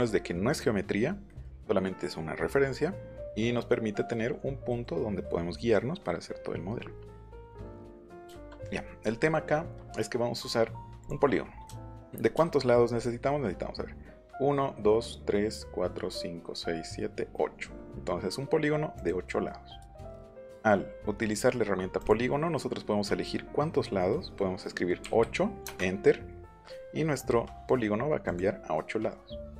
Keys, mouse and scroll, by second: 1.2 middle click, 1.6-2.9 middle drag, 3.5 middle click, 11.0 click, 11.7 shift+middle click, 12.3 shift+middle click, 12.9 middle click, 18.9 click, 21.9 click, 25.0 KP_8, 25.6 Return, 28.2 click.